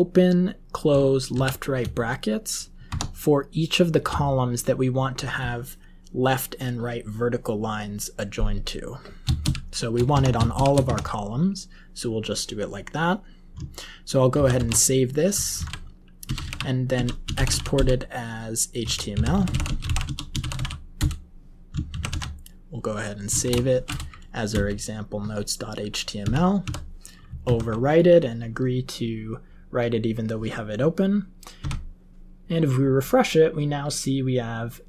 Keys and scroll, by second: 1.3 <, 2.8 Tab, 9.3 <, 10.0 Tab, 10.5 <, 10.8 Tab, 14.3 ctrl+x, 14.7 ctrl+s, 15.5 alt+x, 15.9-22.3 typing, 23.4 shift+e, 24.5 Return, 26.2 y, 26.6 y, 27.4 super+Right, 31.6 F5.